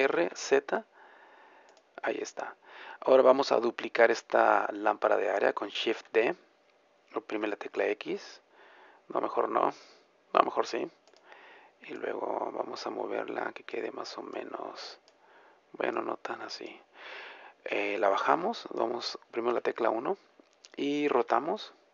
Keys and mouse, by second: 6.0 shift+d, 11.2-13.9 drag, 18.9-20.4 drag, 19.5 KP_1, 21.2 r.